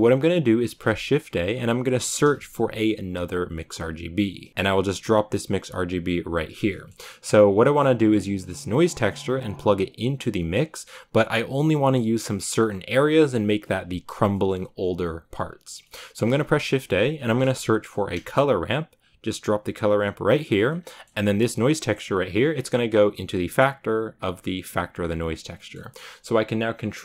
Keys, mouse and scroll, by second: 6.6-8.5 middle drag, 8.5-18.9 drag, 18.9 shift+a, 21.1-27.0 drag.